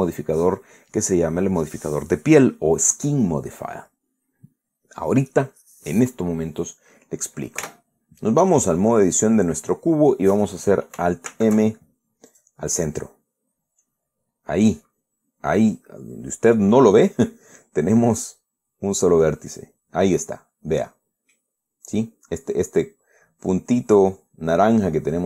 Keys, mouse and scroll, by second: 8.3 Tab, 12.0 alt+m, 13.0 click, 14.5-14.9 scroll up 1, 18.0-19.0 drag, 19.7 click, 20.9 scroll down 1, 24.0-24.3 scroll up 1.